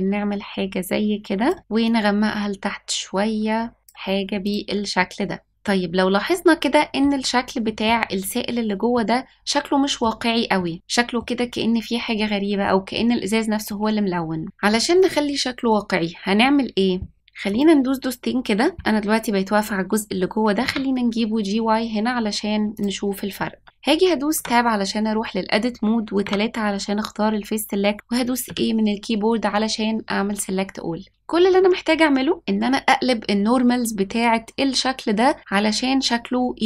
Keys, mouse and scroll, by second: 4.4 click, 4.9-5.5 middle drag, 5.6-7.0 middle drag, 7.6 middle click, 8.1 scroll down 1, 8.9-10.0 middle drag, 10.5-11.3 middle drag, 12.6-13.0 middle drag, 13.5-13.9 scroll up 1, 17.4 click, 20.5 g, 24.3 Tab, 26.2 3, 28.4 a.